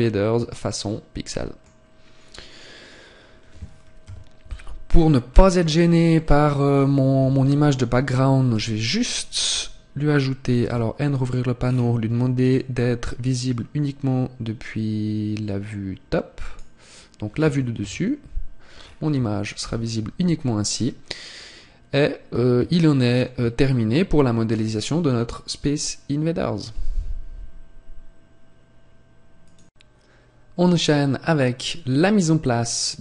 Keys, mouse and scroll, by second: 2.3 scroll down 2, 4.0 KP_1, 5.3 scroll down 5, 6.1 middle click, 6.1-6.5 scroll down 1, 7.1 KP_1, 8.5 z, 10.6 n, 11.5-12.1 scroll down 1, 12.4 click, 12.4 scroll down 4, 17.7 KP_7, 18.8-19.3 scroll up 2, 19.5 n, 20.3-21.1 scroll up 5, 22.7 shift+middle click, 32.3 scroll down 1.